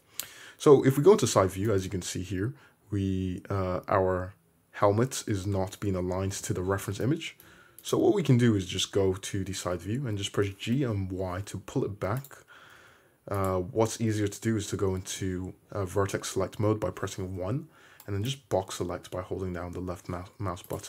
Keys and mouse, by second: 0.2 `, 7.8 click, 7.9-13.4 middle drag, 8.5 `, 10.1 g, 12.8 1, 13.4 click, 13.5-15.8 middle drag, 15.8-20.8 drag, 15.8-18.1 right drag, 19.6 g.